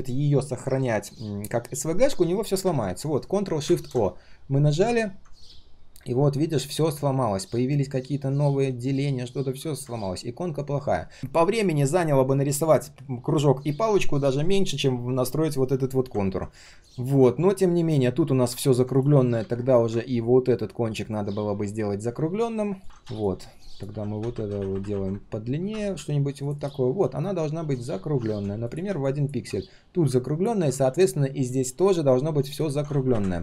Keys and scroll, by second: 3.6 ctrl+shift+o, 7.1 ctrl+shift+3, 8.5 ctrl+shift+3.